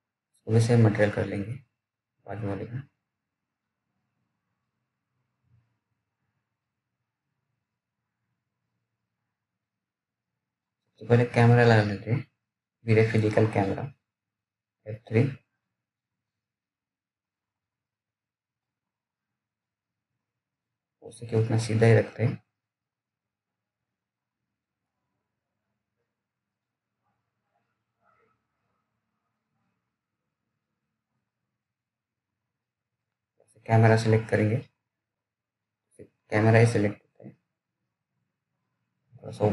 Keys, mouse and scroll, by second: 0.8 t, 1.5-3.0 scroll down 1, 3.0 click, 14.6 s, 16.9 F3, 18.1 click, 23.6-25.1 scroll down 1, 26.3 f, 28.6-29.9 scroll down 1, 29.9 click, 30.0 click, 31.1 ctrl+z, 32.9 click.